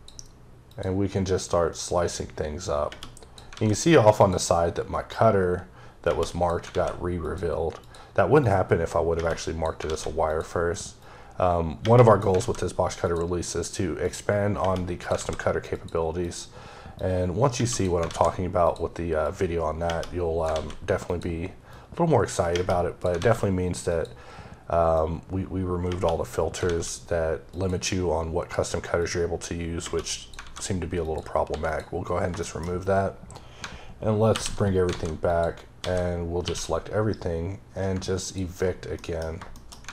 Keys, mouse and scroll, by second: 0.5 click, 1.3 click, 4.0 click, 4.9 click, 7.0 click, 7.6 click, 8.2 click, 10.1 click, 10.8 click, 12.9 click, 13.9 click, 15.6 click, 16.1 click, 16.8 click, 18.5 click, 19.1 click, 20.9 click, 21.5 click, 23.7 click, 24.8 click, 27.3 click, 28.8 click, 30.9 click, 31.4 x, 31.5 click, 32.3 shift+middle click, 32.6-33.4 scroll up 2, 34.2 alt+h, 35.1 click, 35.6 a, 38.0 click, 38.8 middle click, 39.1 scroll down 2, 39.4 shift+middle click, 39.7 alt+a.